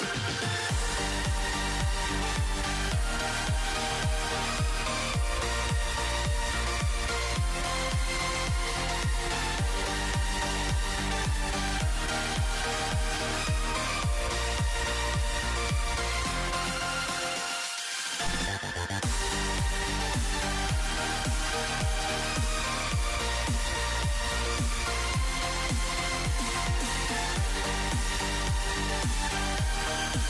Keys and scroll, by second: 5.7-9.8 typing, 13.1-16.0 typing, 17.6-18.5 typing, 20.8-24.2 typing, 25.6-26.4 typing.